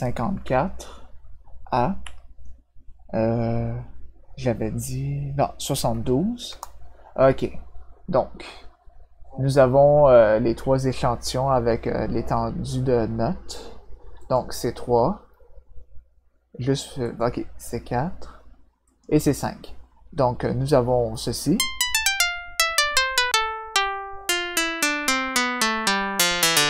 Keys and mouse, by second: 2.0 -, 6.4 Return, 14.2 click, 17.0 click, 18.8 click, 21.4-26.6 drag.